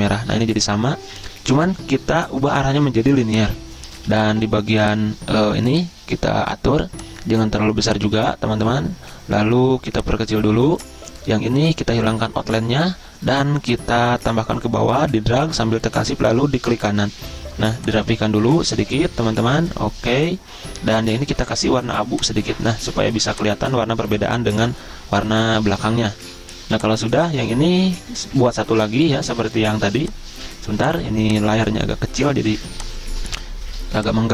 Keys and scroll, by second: 28.9 ctrl+z, 32.6 z.